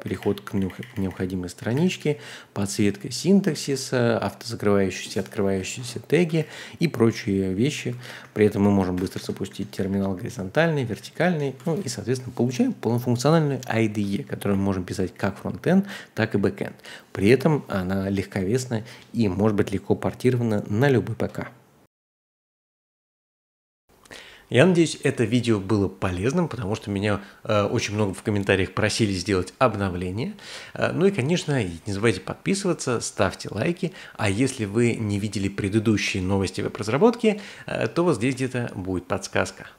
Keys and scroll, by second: 0.0-2.5 typing, 3.5 ctrl+o, 4.9 k, 5.6 ctrl+h, 6.4 ctrl+l, 8.2 ctrl+\, 9.0 ctrl+\, 9.2 ctrl+\, 9.8-10.1 typing, 10.9 ctrl+\, 11.3 ctrl+\, 14.1 ctrl+h, 14.4 ctrl+d, 15.1-16.6 typing.